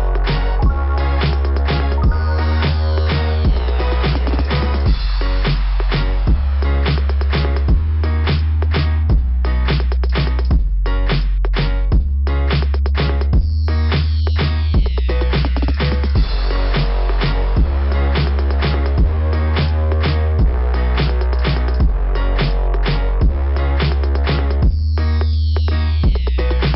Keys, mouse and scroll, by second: 5.0 click, 5.3 click, 5.5 click, 6.0 click, 6.1 click, 6.1 click, 9.3-10.6 scroll down 5, 12.3 scroll down 1, 15.3 click, 15.6 click, 16.0 click, 16.3 click, 16.6 click, 16.8 click, 16.9 click, 17.1 click, 17.3 click, 17.4 click, 17.6 click, 17.7 click, 17.9 click, 18.1 click, 18.2 click, 18.4 click, 18.5 click, 18.7 click, 18.8 click, 20.8-21.2 scroll up 2, 26.5 click, 26.6 click.